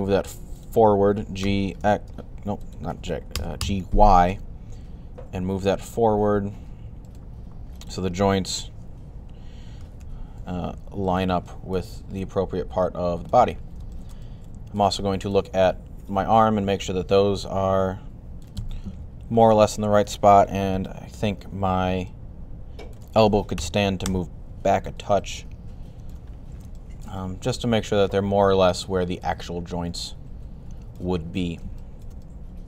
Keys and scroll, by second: 1.0-3.4 typing, 9.4-10.3 typing, 18.7 3, 23.2-24.4 typing.